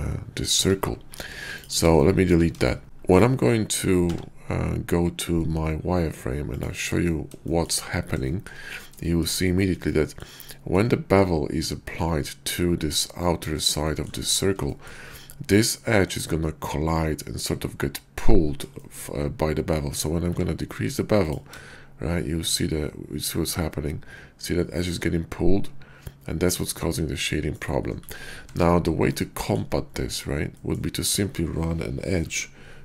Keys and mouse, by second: 0.5 Tab, 1.3 x, 1.9 shift+click, 2.6 shift+click, 3.0 click, 3.9 q, 7.5 shift+click, 8.2 shift+drag, 9.8 middle click, 10.4 shift+drag, 13.8-14.1 shift+middle drag, 14.6-14.9 shift+middle drag, 18.7 shift+middle click, 20.1 q, 27.6 right click, 28.4 Tab, 29.1 click, 30.6 click, 32.2 k.